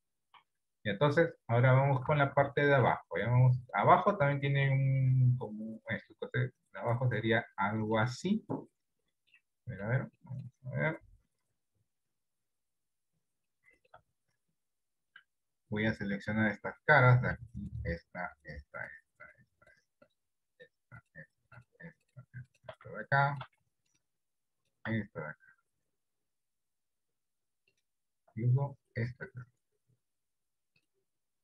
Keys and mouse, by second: 0.1 KP_1, 0.7 KP_3, 2.2 Tab, 2.8 shift+middle click, 3.8 middle click, 5.0-6.2 middle drag, 6.9 middle click, 7.7 middle click, 8.4 middle click, 9.7 middle click, 10.3 middle click, 11.1 KP_7, 11.9 ctrl+KP_7, 13.6 shift+middle click, 23.2 shift+middle click.